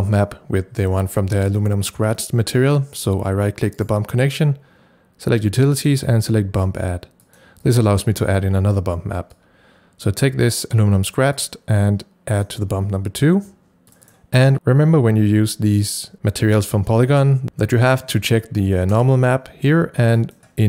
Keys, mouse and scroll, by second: 2.3-7.2 drag, 3.8 right click, 7.2-15.3 drag, 19.0-20.2 drag, 20.2 click.